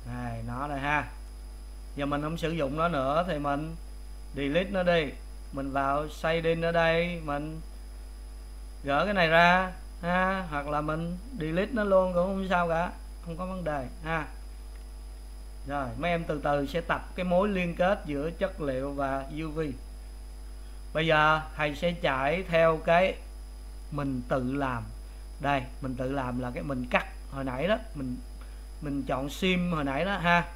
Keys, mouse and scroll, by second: 5.8 click, 7.7 click, 9.5-10.7 drag, 12.3 Delete, 13.6-15.3 drag, 22.5-30.5 middle drag.